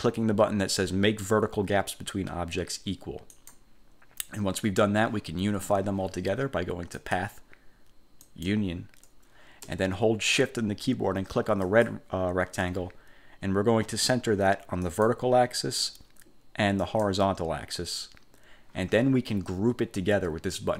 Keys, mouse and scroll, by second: 3.4 click, 7.1 click, 8.3 click, 11.8 shift+click, 15.0 click, 16.9 click.